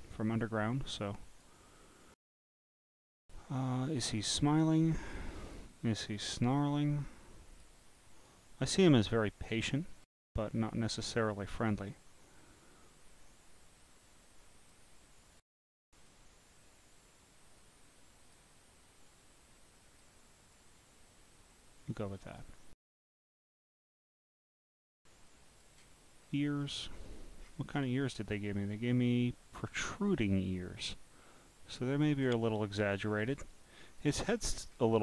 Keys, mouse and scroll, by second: 1.1 click, 4.1-5.6 drag, 6.0 click, 8.0 click, 12.4-14.7 drag, 16.1-18.4 drag, 19.2 click, 20.5-22.4 drag, 24.2 click, 25.3 click, 26.2-26.6 scroll down 1, 26.6-27.3 scroll up 1, 27.4-28.0 scroll up 3, 30.6-32.0 drag, 33.1 scroll up 5, 33.5 click, 34.4-34.9 scroll up 10.